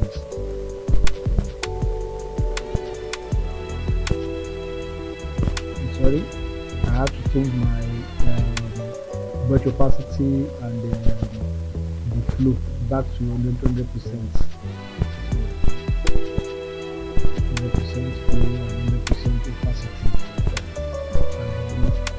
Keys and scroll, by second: 5.0 ctrl+z, 13.9 ctrl+z.